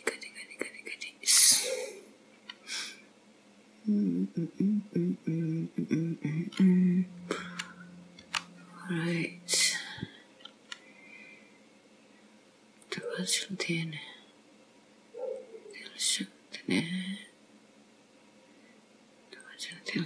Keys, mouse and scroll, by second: 8.3 k.